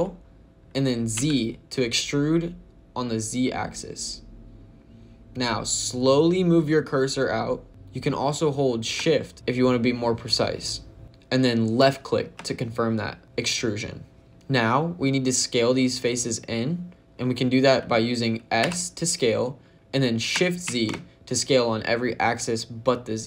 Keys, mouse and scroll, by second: 1.0 z, 11.7 shift+click, 18.5 s, 20.5 shift+z.